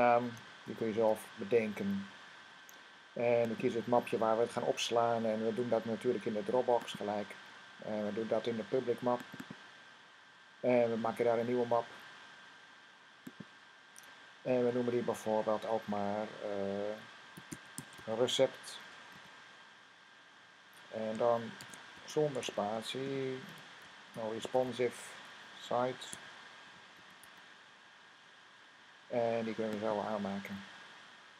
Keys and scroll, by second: 0.0-1.3 typing, 17.0-19.0 typing, 21.2-24.8 typing, 26.0-27.1 typing, 29.0-29.7 typing.